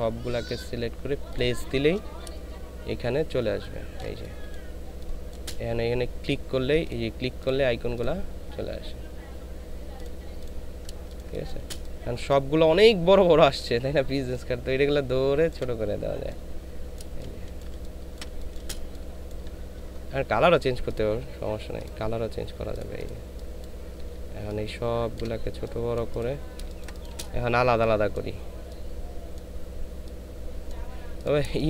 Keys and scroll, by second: 3.3 ctrl+space, 11.0 ctrl+space, 17.0 space, 17.6 ctrl+space, 26.6 ctrl+space, 31.5 ctrl+space.